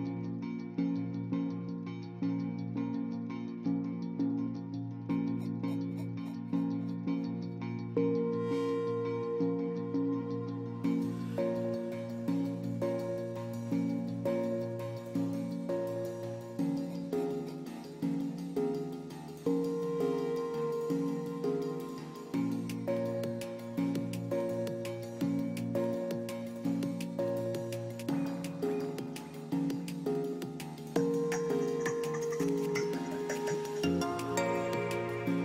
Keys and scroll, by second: 1.6 space, 6.2 space, 10.9 space, 12.8 space, 15.5 space, 18.5 space.